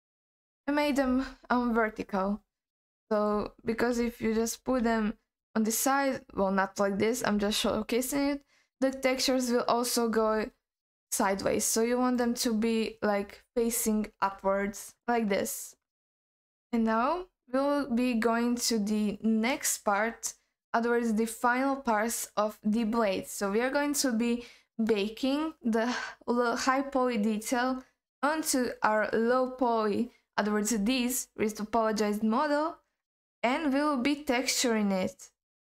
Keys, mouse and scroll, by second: 2.3-2.8 scroll down 2, 2.8 scroll up 1, 3.1 click, 3.9 l, 4.8 r, 12.1 click, 12.6-14.6 scroll down 1, 15.6-16.1 scroll down 2, 16.1-16.6 scroll up 2, 16.7-17.1 scroll down 1, 17.1 scroll up 1, 17.4-19.9 scroll down 2.